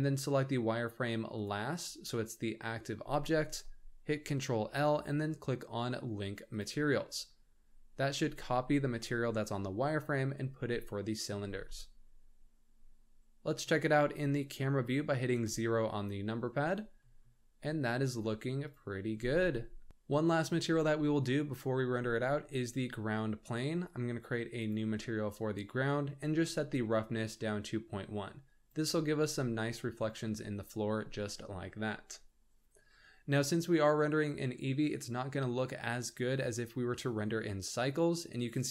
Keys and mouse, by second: 4.6 ctrl+l, 11.5 alt+a, 12.8-13.2 drag, 15.4 KP_0, 19.2 g, 24.6 click, 26.9-28.7 ctrl+drag.